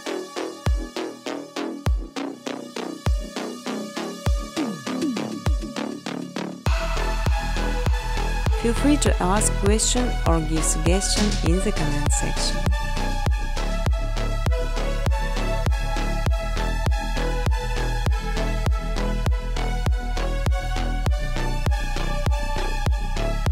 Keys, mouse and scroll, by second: 1.6 click, 2.6 click, 4.8-6.8 typing, 8.2 click, 8.3 click, 10.8 space, 12.2 space, 13.0 click, 16.3 click, 16.5 space, 18.0 space, 18.3 scroll, 18.4 space, 18.4 middle click, 18.9 space, 19.1 middle click, 19.1 middle click, 20.2-23.5 typing, 20.5 middle click, 21.7 scroll.